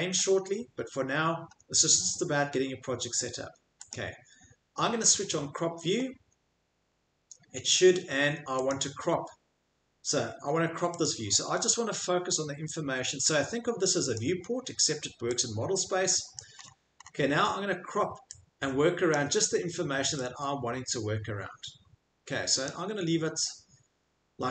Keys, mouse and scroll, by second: 3.9 click, 6.0-6.8 scroll, 6.8-8.7 middle click, 8.7 click, 11.0 click, 11.2 middle click, 11.4 middle click, 11.7 scroll, 14.2 click, 16.3 click, 16.6-17.1 middle click, 17.0 middle click, 19.1 click, 22.7 click, 23.9 middle click.